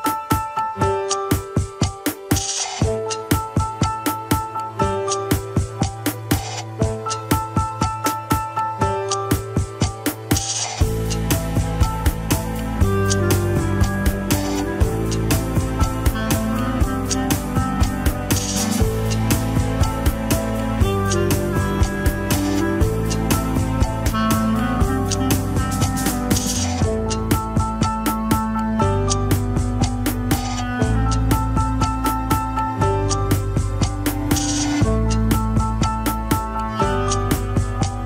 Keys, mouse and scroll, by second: 1.1 ctrl+KP_1, 3.3 alt+z, 3.8 click, 4.4 alt+z, 5.0 r, 8.1-8.6 scroll down 4, 8.6-9.4 middle drag, 9.4 KP_1, 9.9 alt+z, 10.4 click, 11.0-11.6 scroll up 2, 11.6 g, 15.2-15.6 scroll down 3, 15.6-16.1 shift+middle drag, 16.1 scroll up 2, 16.8 g, 21.7 alt+r, 22.1 alt+g, 22.2-22.7 scroll up 4, 22.2-22.6 shift+middle drag, 23.2 ctrl+Tab, 23.8 ctrl+s, 24.2 shift+drag, 24.6 ctrl+Tab, 25.3 alt+z, 26.0 scroll down 1, 26.2 ctrl+Tab.